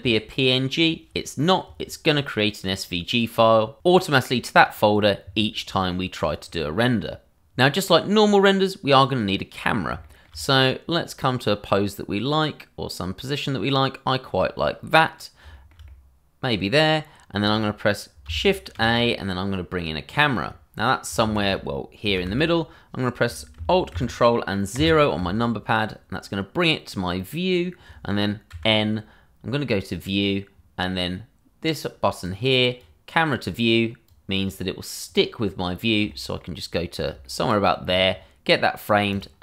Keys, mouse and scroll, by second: 8.8-9.3 scroll down 1, 9.3 middle click, 10.1 shift+middle click, 10.6 middle click, 15.1-15.4 scroll up 1, 15.5 shift+middle click, 15.8 middle click, 18.7 shift+a, 20.0 click, 21.2 shift+z, 23.1 shift+z, 24.7 ctrl+alt+Insert, 28.5 n, 29.9 click, 32.2 click, 35.6-36.0 scroll down 1, 36.1 shift+middle click, 36.6-37.1 scroll up 1, 37.2 shift+middle click, 37.3 middle click, 37.4 shift+middle click, 39.1 click.